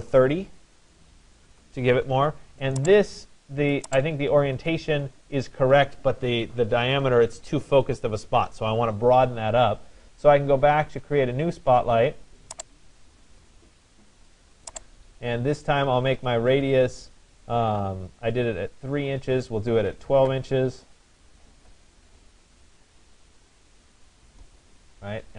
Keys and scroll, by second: 0.1 0, 1.6 Tab, 19.7 1, 20.3 2, 23.9 Return.